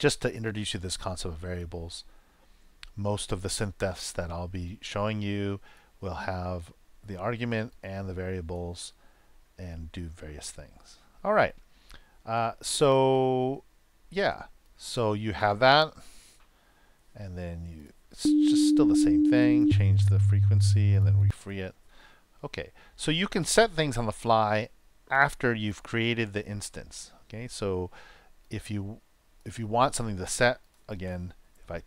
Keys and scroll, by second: 16.0 super+Return, 18.1 super+Return, 19.6 super+Return, 21.2 super+Return, 31.3 super+Return.